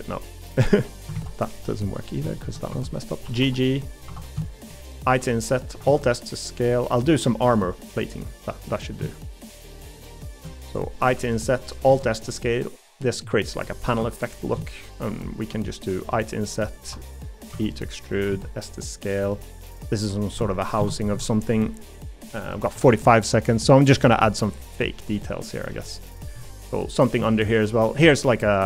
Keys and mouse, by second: 1.1 ctrl+z, 1.5 middle click, 2.3 middle click, 2.7 1, 3.2 g, 4.1 3, 5.1 i, 5.8 alt+s, 6.7 middle click, 7.5 middle click, 8.0 middle click, 10.5 middle click, 11.9 alt+s, 13.6 middle click, 14.0 3, 16.1 i, 17.5 e, 18.3 s, 20.8 ctrl+KP_Add, 22.7 g, 24.3 middle click, 25.2 middle click, 26.4 middle click.